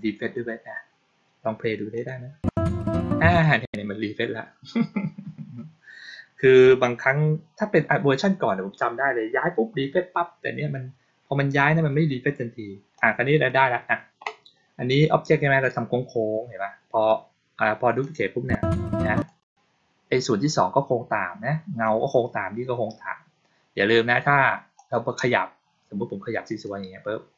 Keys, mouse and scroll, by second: 1.8 click, 3.2 click, 12.8-13.3 drag, 17.9 click, 19.0 click, 24.6-26.5 drag.